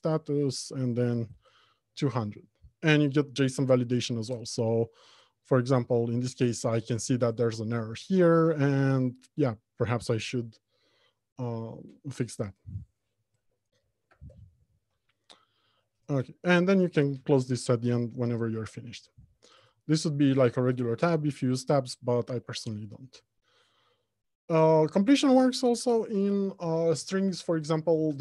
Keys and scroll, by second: 18.6 alt+Home, 19.4 Left, 19.7 Return.